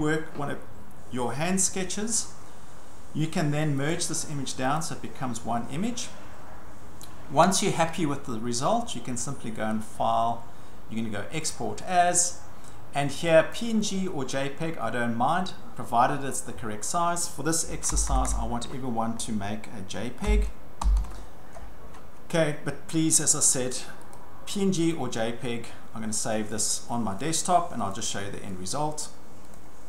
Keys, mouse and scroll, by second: 3.9 click, 4.8 click, 9.9 click, 11.5 click, 13.6 click, 17.9 BackSpace, 18.1 BackSpace, 18.3 BackSpace, 20.3-21.5 typing, 24.1 click, 24.9 click, 27.2 click, 27.9 click, 29.0 click, 29.6 click.